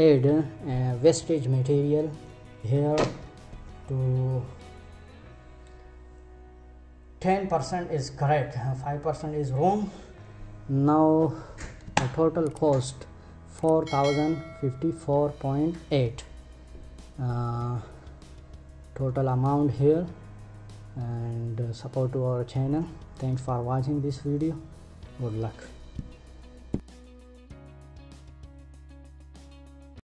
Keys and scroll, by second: 11.4 Return, 29.4 Escape.